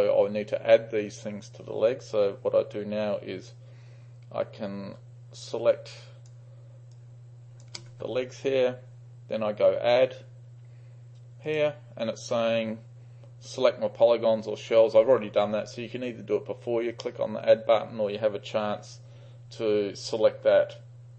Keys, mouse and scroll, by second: 5.5-6.4 shift+drag, 7.0-7.7 shift+drag, 11.5 click.